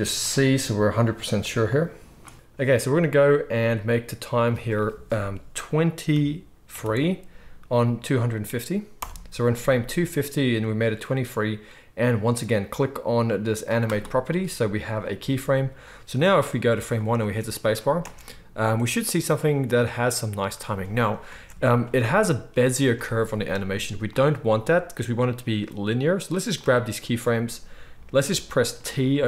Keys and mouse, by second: 13.9-15.8 drag, 17.1 space, 17.9 space, 21.2 space, 26.5-29.2 drag, 26.5-29.2 middle drag, 26.5-29.2 right drag, 28.7 t.